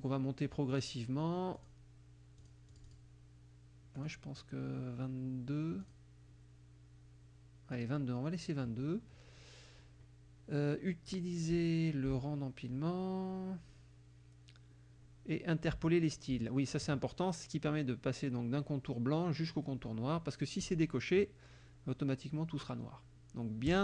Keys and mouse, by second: 0.8 click, 1.6 click, 2.4 click, 4.0 click, 5.9 click, 7.8 click, 20.7 click, 23.7 click.